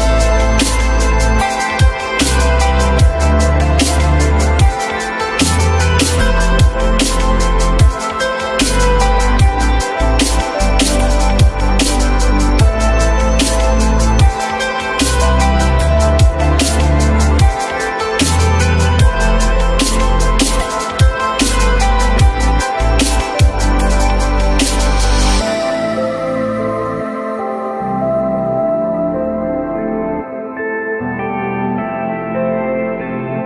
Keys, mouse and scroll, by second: 9.3 F3, 11.1 ctrl+click, 12.5 alt+middle click, 13.8 r, 18.6 Delete, 19.0 F3, 20.4 alt+middle click, 26.7 ü.